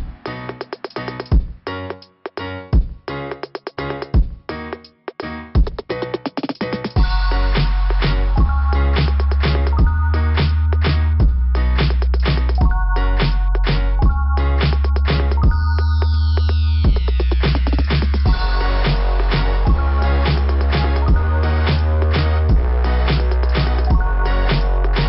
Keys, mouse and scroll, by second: 4.1-4.7 scroll up 2, 8.2 scroll down 2, 8.8 [, 9.0 [, 9.2 scroll down 1, 9.3 [, 11.4 scroll down 2, 11.4 typing, 12.4 click, 13.9-14.4 typing, 14.5 scroll down 2, 15.8 ], 17.4 click, 17.6 click, 20.6 click, 23.3 click, 24.8 click.